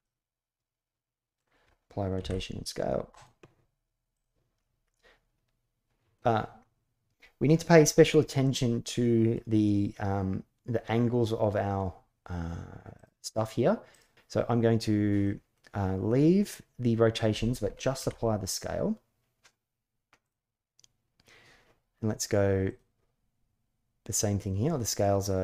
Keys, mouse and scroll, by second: 2.0 ctrl+a, 4.7-5.9 middle drag, 8.1-9.1 middle drag, 12.8 click, 13.7 click, 15.0 middle click, 17.7 ctrl+a.